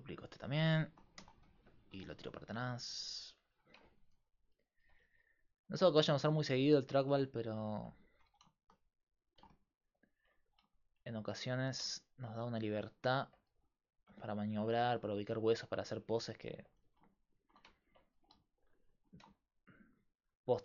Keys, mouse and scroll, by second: 1.2 shift+d, 2.0 r, 5.1 g, 6.3 g, 8.2 r, 10.4 r, 14.9 g, 15.3 click, 16.8 g, 18.0-19.1 drag, 18.2 r, 19.6 click.